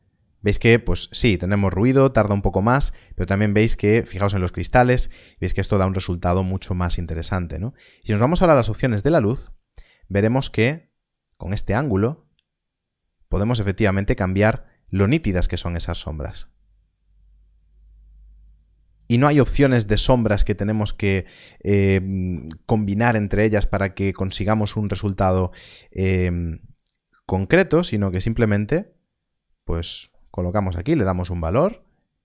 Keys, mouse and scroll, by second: 0.9 click, 8.5 middle click, 11.0 click, 16.1 click, 26.0 click, 31.2 r.